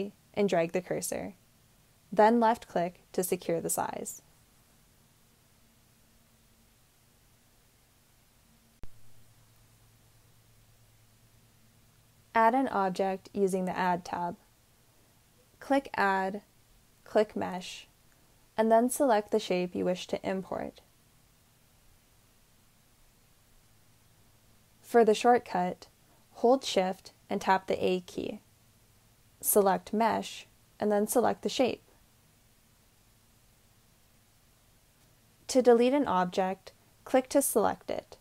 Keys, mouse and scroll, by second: 2.9-5.1 drag, 25.9 shift+a.